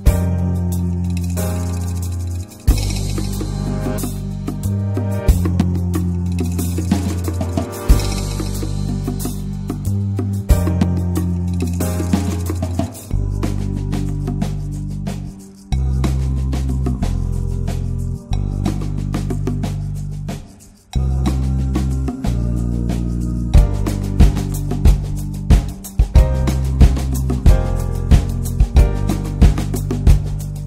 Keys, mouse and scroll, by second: 0.1 click, 1.0-3.1 right drag, 3.1 shift+r, 3.8-5.0 drag, 5.0 shift+f, 5.9 shift+f, 6.5 right click, 7.4 click, 7.7 shift+click, 8.5 shift+r, 9.1 alt+z, 9.2 middle click, 9.7 click, 10.4 click, 11.1-12.6 drag, 12.6 middle click, 13.2 scroll up 1, 14.1 alt+z, 14.6 2, 14.7 click, 15.4 shift+click, 15.7-19.8 right drag, 19.8 1, 20.0 click, 20.6 shift+click, 20.9 alt+middle click, 21.3 alt+middle click, 21.7 alt+z, 22.0 alt+z, 22.2-23.8 drag, 23.8 alt+z, 24.0 scroll down 2, 24.1 middle click, 24.4 Tab, 24.5-25.3 drag, 25.3 ctrl+1, 25.9 ctrl+2, 26.1 ctrl+drag, 26.3-26.8 middle drag, 26.8 click, 27.1-27.4 right drag, 27.4 click, 27.6 click, 27.7 right click, 28.1 click, 28.4-29.1 middle drag, 29.1 scroll up 1, 29.1 Tab, 29.4 alt+middle click, 30.6 shift+middle click.